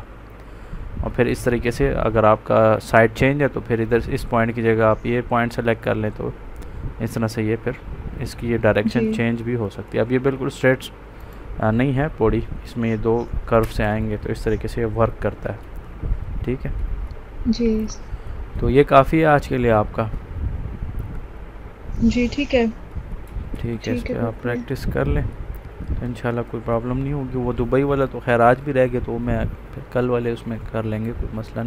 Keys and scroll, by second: 23.8 ctrl+c.